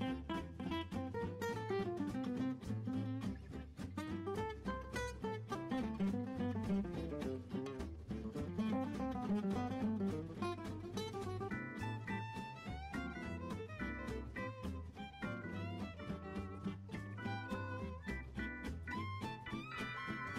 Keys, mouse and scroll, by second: 0.5-1.2 scroll down 1, 1.2-2.9 scroll up 17, 2.9-5.9 drag, 6.1-7.7 drag, 7.7-8.0 scroll down 2, 12.7-14.0 scroll up 3, 14.0-15.5 drag, 15.5-16.8 scroll up 5, 16.8-17.5 drag, 17.5-20.3 scroll down 3.